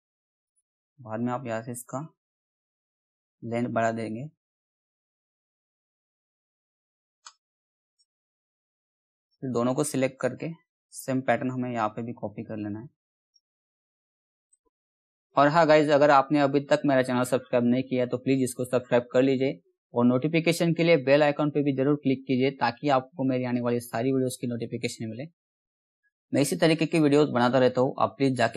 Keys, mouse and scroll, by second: 3.0-21.6 drag, 21.6 right click, 22.3 click, 27.0 click.